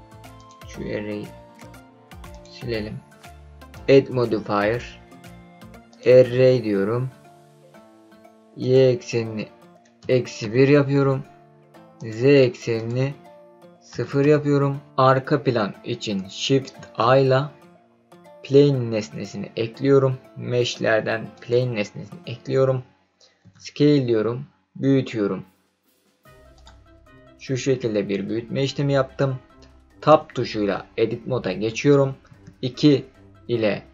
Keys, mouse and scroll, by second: 2.3-3.3 drag, 3.7-6.1 drag, 8.6-12.0 drag, 12.7-14.8 drag, 16.7 shift+a, 23.4 s, 26.5 click, 27.0-29.7 scroll down 4, 30.1 Tab, 32.2 2.